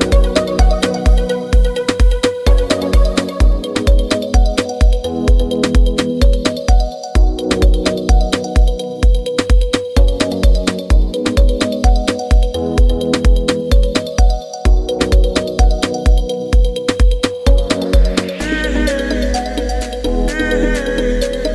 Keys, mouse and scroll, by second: 3.3-21.5 drag.